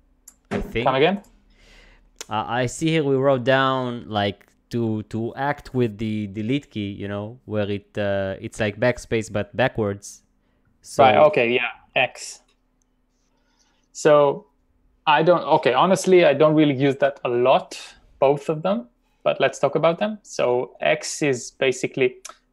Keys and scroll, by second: 19.4-20.4 typing.